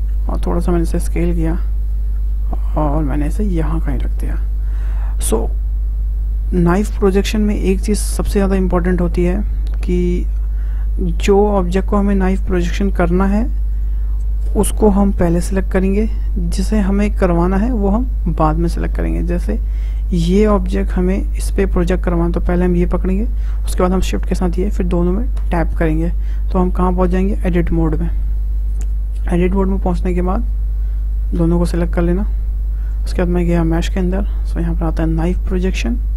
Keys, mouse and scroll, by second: 1.9 click, 3.2-3.9 scroll up 3, 3.9-6.9 shift+middle drag, 9.1 click, 11.5-16.8 drag, 17.6 click, 17.9 Tab, 18.8-19.2 scroll down 2, 19.2-20.5 middle drag, 20.5 click, 21.0 click, 23.8 shift+click, 25.4 Tab, 26.1-27.4 middle drag, 27.4 scroll up 2, 28.1 scroll down 2, 28.2-29.8 middle drag, 29.8 `, 31.4 a, 33.7-36.1 drag.